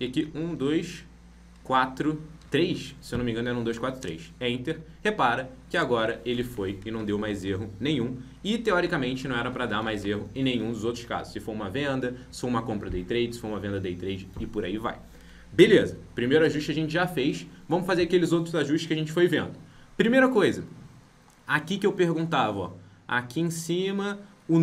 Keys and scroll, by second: 6.9 ctrl+Left, 9.2 ctrl+shift+Right, 9.7 ctrl+Left, 15.5 ctrl+b, 16.3 alt+Tab.